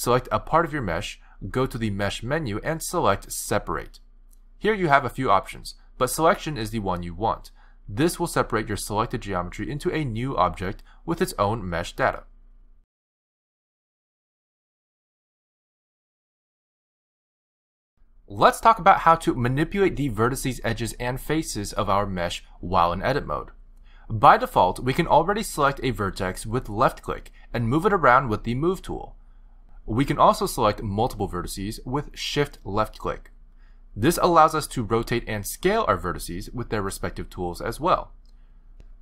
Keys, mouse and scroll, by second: 1.6 click, 9.3 click, 10.1 click, 10.5 g, 11.5 click, 11.7 g, 23.6 click, 27.0 click, 29.1 g, 32.4 shift+click, 34.9 r, 36.4 s.